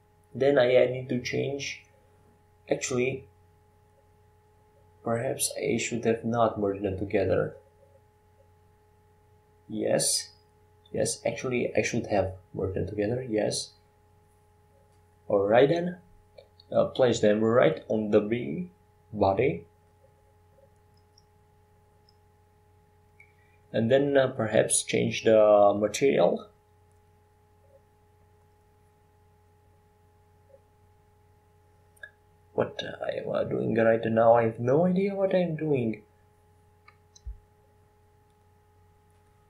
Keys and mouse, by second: 1.8 Tab, 2.3 Tab, 3.2 Tab, 7.3 e, 8.8 s, 11.8 click, 12.8 s, 18.0 click, 18.2 click, 22.9 Tab, 25.3 shift+a, 35.5 Tab, 36.1 w, 37.3 w.